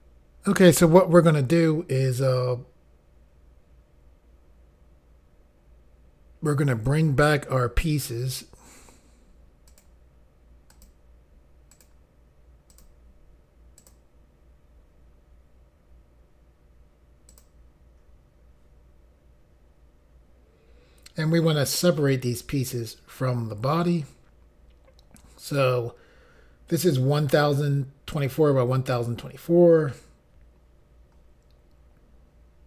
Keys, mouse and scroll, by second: 9.7 click, 10.7 click, 11.7 click, 12.7 click, 13.8 click, 17.3 click.